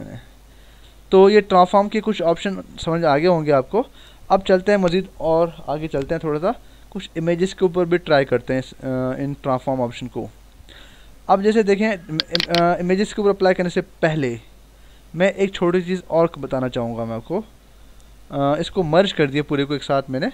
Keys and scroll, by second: 0.9 ctrl+-, 13.4 ctrl+alt+z, 16.2 ctrl+alt+z, 19.0 ctrl+e.